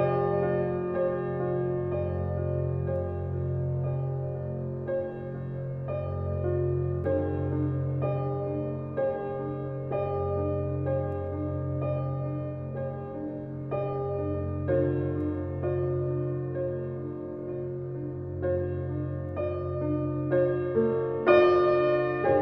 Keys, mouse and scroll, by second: 4.5 click, 5.2 alt+middle click, 5.9 click, 6.6 click, 7.3-9.2 drag, 9.6 click, 11.1 click, 11.6 drag, 12.5 click, 13.2-13.9 drag, 21.4 click.